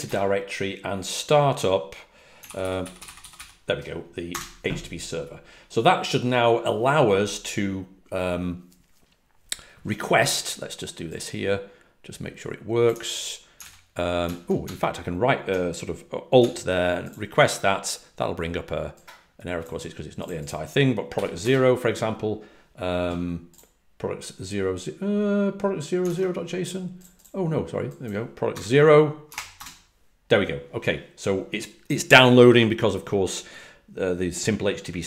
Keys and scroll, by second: 0.0-0.1 typing, 2.7-4.2 typing, 13.5 super+c, 21.3 0, 21.3 Return, 29.2 space, 29.5 Return.